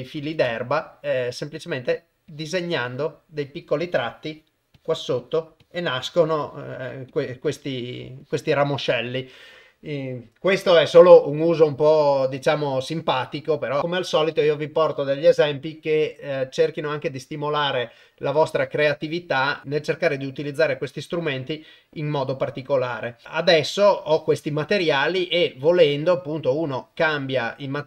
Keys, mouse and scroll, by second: 1.6 click, 2.3 click, 2.8 click, 3.8 click, 4.3 click, 4.7 click, 5.2 click, 5.6 click, 6.1 click, 6.4 click, 6.7 click, 7.1 click, 7.5 click, 7.8 click, 8.2 click, 8.6 click, 9.1 click.